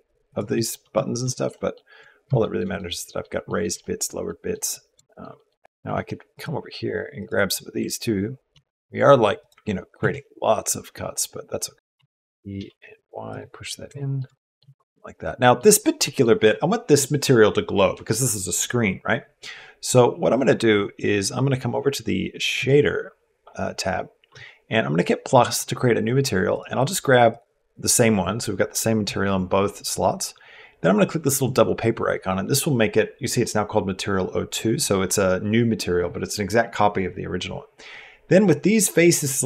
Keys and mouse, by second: 0.3 click, 0.6 Tab, 1.1 shift+click, 1.3 click, 2.2 shift+click, 2.6 click, 3.3 shift+click, 3.6 click, 4.2 middle click, 4.9 shift+middle click, 5.2 middle click, 5.6 ctrl+Tab, 5.8 ctrl+r, 8.3 ctrl+r, 9.8 ctrl+r, 11.7 e, 13.8 shift+middle click, 14.1 middle click, 14.4 Tab, 14.9 middle click, 14.9 g, 15.8 middle click, 24.8 click, 26.3 click, 38.6 click.